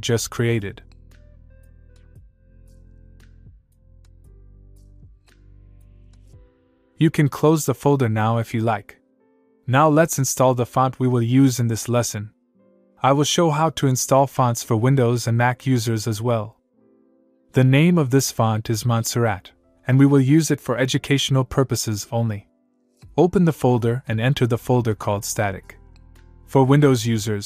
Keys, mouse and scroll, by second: 9.0 click, 11.0-12.4 click, 23.3 click, 24.8 click, 26.0 click, 26.3-26.9 scroll down 1, 27.2 shift+click.